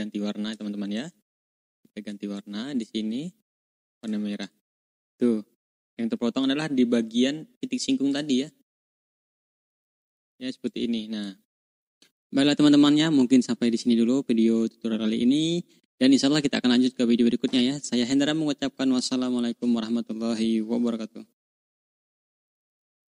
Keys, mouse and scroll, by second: 1.4-1.8 ctrl+scroll down 2, 2.3 click, 3.9 click, 4.3 click, 4.8-5.1 ctrl+scroll up 2, 8.0 click, 8.4-9.2 drag, 9.9 click, 10.6-11.3 drag, 11.7 ctrl+scroll down 1, 11.9 ctrl+scroll up 1, 14.2 ctrl+scroll down 1, 14.6 ctrl+scroll up 2, 21.9 click.